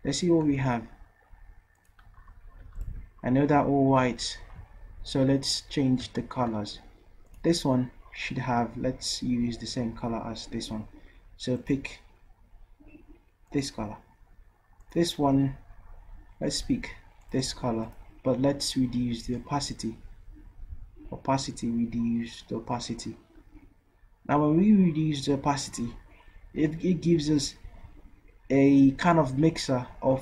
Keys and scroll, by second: 0.5 v.